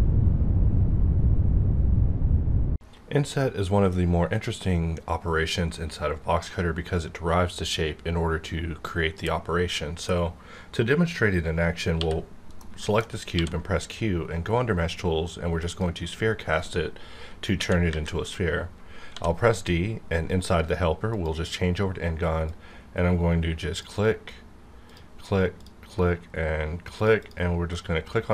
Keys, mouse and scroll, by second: 13.3 q, 15.6 click, 17.4 KP_1, 17.8 KP_5, 19.1 d, 21.0-24.9 drag, 27.2 double click, 27.7-28.3 middle drag.